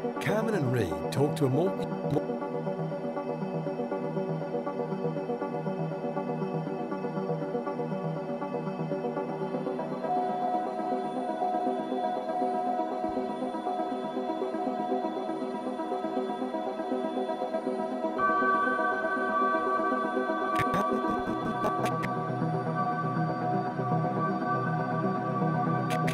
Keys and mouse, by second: 1.8-4.1 typing, 2.1-4.1 drag, 6.0 typing, 7.3-8.8 ctrl+alt+drag, 8.8 typing, 10.1-13.5 drag, 14.3-15.6 alt+shift+drag, 16.0 typing, 17.2-18.0 typing, 17.5 click, 18.5-26.1 drag, 22.5-23.2 typing.